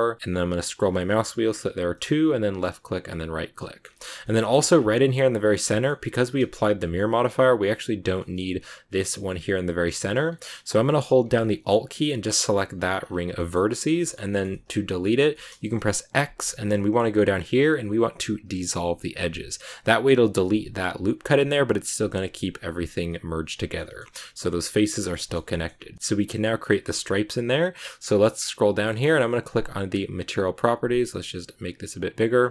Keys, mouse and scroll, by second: 3.5-4.6 middle drag, 4.6 scroll up 3, 5.6-10.0 shift+middle drag, 10.0-11.2 scroll up 2, 12.1 alt+right click, 12.9 scroll down 1, 12.9 scroll up 1, 13.0 scroll down 1, 13.3-14.9 shift+middle drag, 14.2 scroll up 1, 14.9-15.2 scroll down 1, 15.2 shift+middle click, 16.0 x, 22.7 scroll up 1, 22.8 scroll down 3, 23.0-24.6 middle drag, 24.6 scroll down 2, 24.8 shift+middle click, 25.6 scroll down 1, 25.8 middle click, 26.7-27.9 middle drag, 27.9-28.3 scroll down 8, 29.7 click, 31.3 click, 32.2-32.5 scroll down 10.